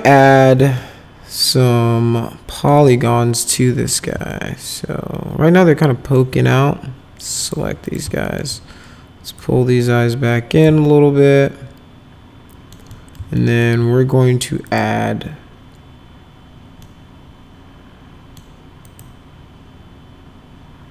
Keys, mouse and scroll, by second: 0.8-2.7 alt+middle drag, 4.3-6.2 alt+middle drag, 7.4 click, 7.9 ctrl+click, 8.3 alt+middle click, 9.4-10.6 drag, 10.9-12.8 alt+middle drag, 12.9 middle click, 13.4 alt+middle click, 14.7 click, 16.8-18.4 middle drag, 18.9 click.